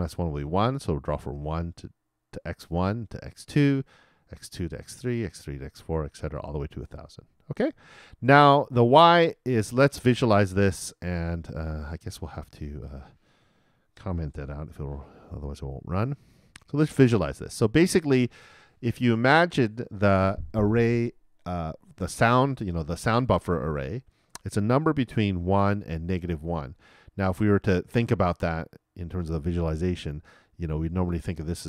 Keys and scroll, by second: 14.4 super+/, 14.5 super+r.